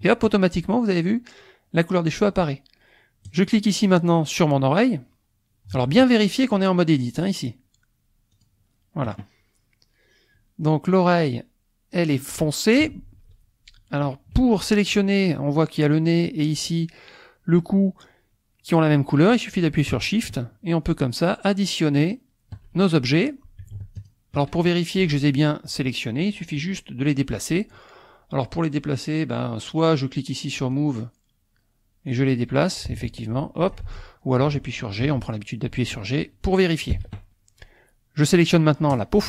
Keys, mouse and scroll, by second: 3.3 click, 7.2 click, 8.4 click, 20.2 shift+click, 22.0 shift+click, 24.0 shift+click, 30.6 click, 32.1-34.0 drag, 33.8 ctrl+z, 35.0 g, 36.9 Escape, 38.9 click.